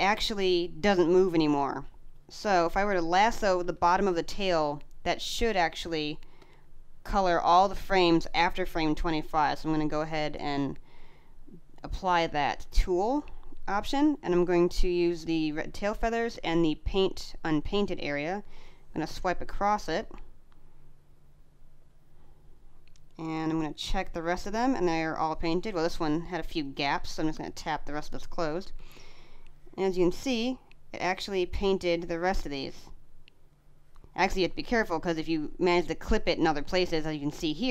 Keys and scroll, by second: 3.5 space, 36.6 space.